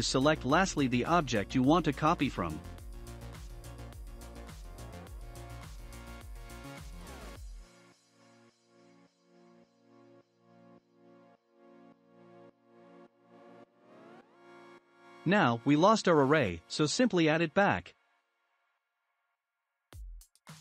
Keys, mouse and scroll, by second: 0.8-3.4 shift+drag, 3.4-5.7 middle drag, 5.7 ctrl+l, 10.9-11.5 drag, 11.5 scroll down 1, 11.9-14.9 shift+middle drag, 15.3 click, 17.0-17.6 scroll up 1, 17.6-20.1 middle drag, 20.1-20.6 drag.